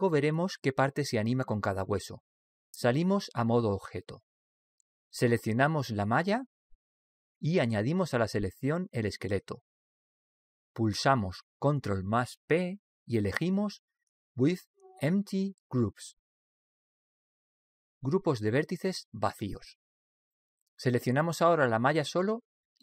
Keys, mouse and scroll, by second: 4.9 Tab, 6.7 right click, 10.4 right click, 12.7 ctrl+p, 22.4 right click.